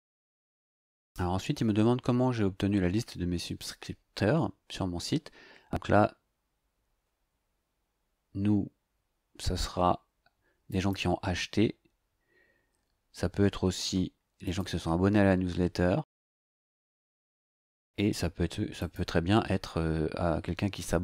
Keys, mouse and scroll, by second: 10.7 click, 14.4 click, 18.8 click.